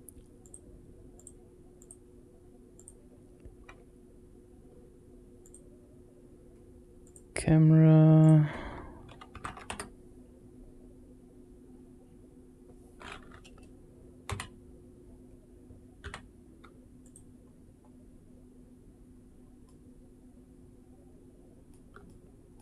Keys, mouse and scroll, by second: 2.6 click, 5.2 click, 6.9 click, 8.0-12.1 drag, 14.1 n, 15.8 n, 16.9 click, 17.3-17.9 scroll up 3, 19.1 scroll down 1, 19.5-21.6 middle drag, 21.9-22.4 shift+middle drag.